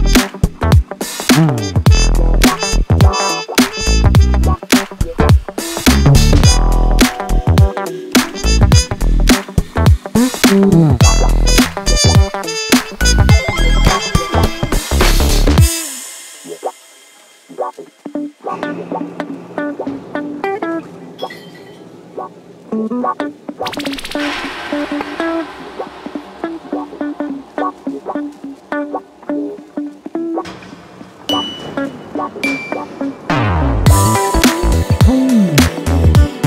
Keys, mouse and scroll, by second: 0.0 scroll up 1, 0.5-2.5 drag, 3.1-4.3 drag, 4.9-5.3 scroll down 1, 5.6 click, 6.9 s, 8.8-10.9 drag, 13.8-15.2 drag, 16.7 click, 17.9 click, 18.5-21.2 drag, 21.6 click, 22.2 click, 22.9 click, 23.5-23.8 scroll up 1, 24.2 click, 25.0-25.7 drag, 27.1 click, 27.7 click, 28.1 click, 28.7-30.3 drag, 30.6 click, 32.1 Delete, 33.2-35.8 drag, 36.2 click.